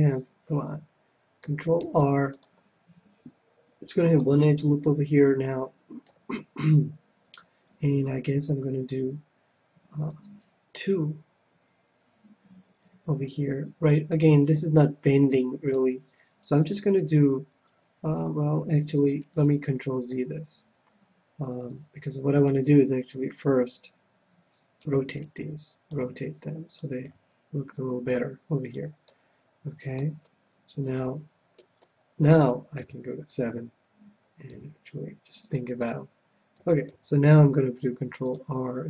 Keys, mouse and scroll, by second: 1.7 ctrl+r, 4.1-5.9 drag, 6.0 a, 8.4 ctrl+r, 14.1-16.0 drag, 15.7 ctrl+r, 20.1 ctrl+z, 20.6 ctrl+z, 21.7 ctrl+z, 22.4 c, 25.2-26.7 right drag, 25.9 r, 26.7-28.4 drag, 27.0 g, 28.7-30.4 drag, 29.0-33.5 middle drag, 32.7 KP_7, 34.5 g, 35.5-37.2 drag, 35.8 a, 36.9 ctrl+r, 37.8 ctrl+r.